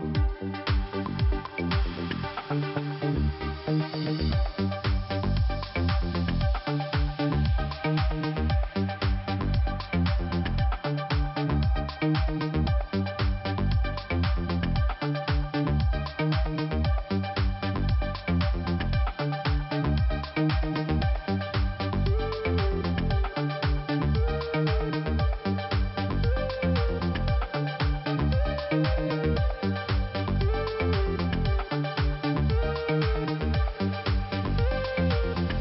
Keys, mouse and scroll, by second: 0.1 click, 2.8 scroll down 1, 4.9 click, 5.6 scroll up 1, 6.6 click, 6.7 click, 9.1 click, 10.3 scroll down 1, 11.8 scroll up 1, 12.4 click, 13.6 click, 16.8 click, 16.9 click, 17.7 click, 19.5 click, 19.6 click, 20.0 click, 20.9 scroll down 1, 21.7-22.8 scroll up 1, 22.8 click, 22.9 click, 23.3 click, 25.1 click, 25.1 click, 25.6 click, 27.2-27.5 scroll down 2, 28.3 scroll up 1, 28.9 click, 29.0 click, 29.3 click, 30.5 scroll down 2, 31.8 scroll up 1, 32.6-33.5 scroll down 1, 33.5 scroll up 1, 34.8 click, 34.9 click.